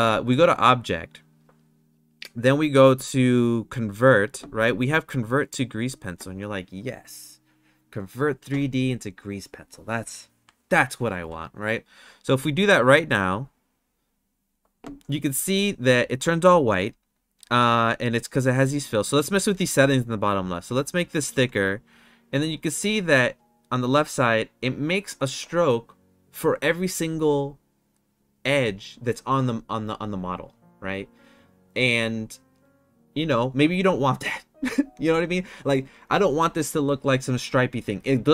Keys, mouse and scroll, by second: 0.8-4.6 drag, 4.7-13.5 drag, 20.6-23.0 drag.